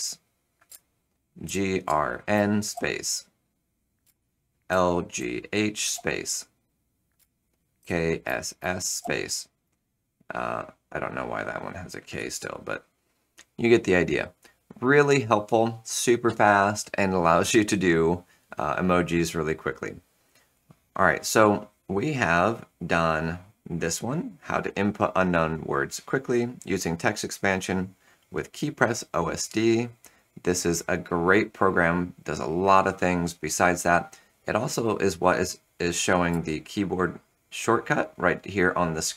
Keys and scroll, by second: 0.6 Return, 1.4 shift+g, 2.2 n, 2.6 space, 3.9 Return, 4.4-5.9 typing, 7.1 Return, 7.7 shift+k, 8.5 s, 8.9 e, 9.0 space, 12.1 BackSpace, 36.2 Return.